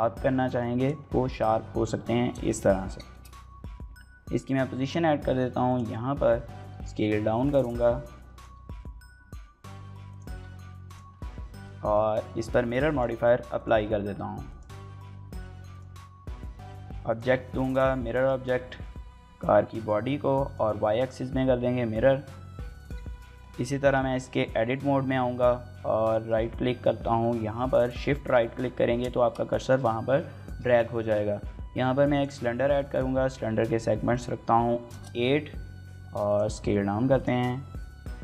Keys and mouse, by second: 0.0-0.5 shift+middle drag, 1.2 KP_1, 2.1 KP_3, 2.9 shift+middle drag, 3.3 g, 5.5 click, 6.1 shift+middle click, 6.5 s, 7.3 click, 7.5 g, 8.3 s, 9.9 click, 10.1 g, 10.7 click, 11.6 shift+middle click, 13.3-14.5 drag, 15.5 click, 17.9 shift+middle click, 19.6 click, 20.2 click, 22.9 shift+middle click, 23.4 Tab, 23.9 shift+middle click, 25.8 shift+right click, 27.0 shift+middle click, 27.7 shift+middle click, 29.3 shift+middle click, 30.2 shift+a, 33.9-35.2 drag, 35.6 s, 36.0 s, 36.2 click, 36.5 s, 36.8 z, 38.0 click.